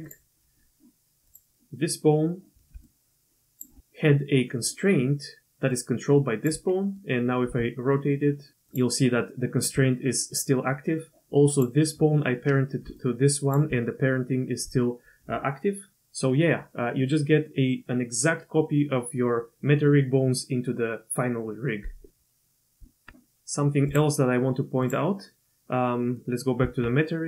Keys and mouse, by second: 1.3 click, 2.8 click, 2.8 d, 4.2-5.7 d, 5.7 click, 6.5 d, 7.5 r, 12.9 d, 13.0 click, 13.5 d, 14.2 d, 22.8 Tab, 23.9 click, 25.9 click, 26.6 Tab.